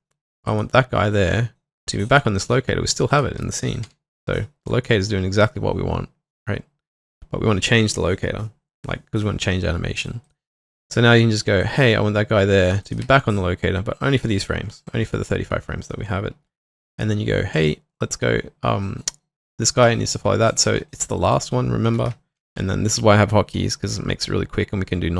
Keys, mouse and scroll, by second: 3.9 h, 12.7 h, 12.8 shift+click, 21.3 shift+click, 22.4 v, 22.4 shift+click.